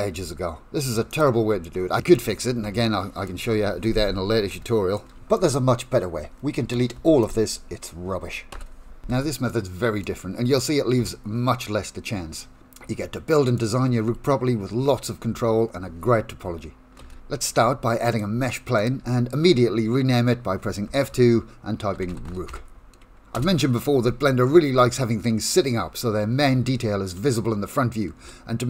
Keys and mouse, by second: 0.1 Tab, 1.1 click, 1.7 shift+middle click, 2.4 middle click, 4.5 shift+middle click, 5.3-6.7 middle drag, 7.2 click, 8.5 Delete, 9.5 shift+middle click, 10.5 click, 10.9 KP_Decimal, 11.5 middle click, 12.3 shift+middle click, 12.9 middle click, 17.0 shift+a, 21.0 F2, 22.2 o, 28.2 KP_1.